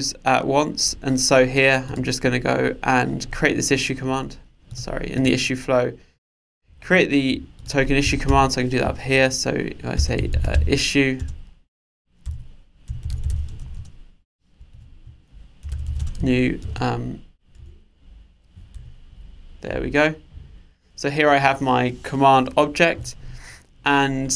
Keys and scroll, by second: 14.8 alt+Return, 18.0 Return.